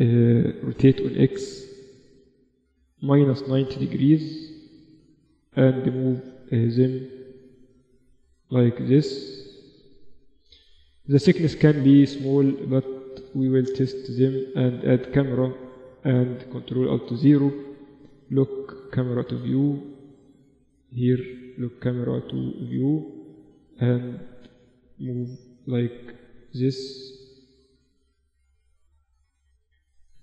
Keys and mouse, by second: 0.0 r, 4.0 z, 4.8-6.4 middle drag, 5.7 z, 6.4-8.9 drag, 10.1-10.9 typing, 12.0 z, 13.6 shift+a, 16.0 ctrl+alt+KP_0, 17.1 n, 19.2 middle click, 20.2-24.3 drag, 22.9 n, 25.0 KP_4, 25.2 KP_4, 25.4 KP_4, 29.1-30.2 middle drag.